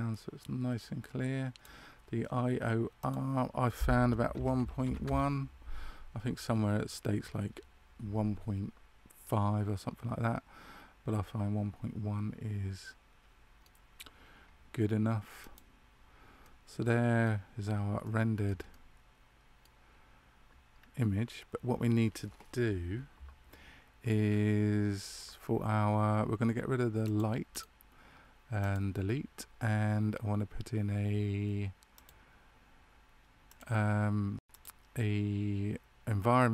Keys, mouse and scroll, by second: 2.9 click, 9.2 middle click, 15.3 click, 16.4 middle click, 18.0 shift+middle click, 18.6 middle click, 20.7 scroll up 1, 24.3-27.0 scroll down 2, 27.0 click, 27.4 right click, 31.9 click.